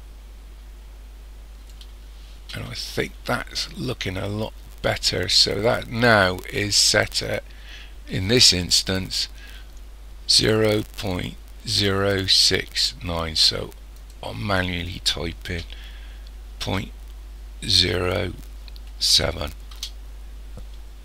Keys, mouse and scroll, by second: 14.0 click.